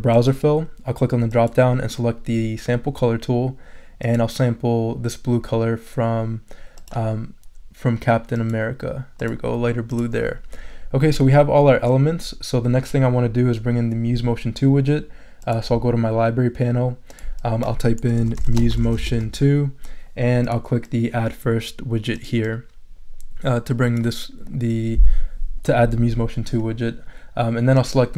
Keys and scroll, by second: 17.9-19.7 typing.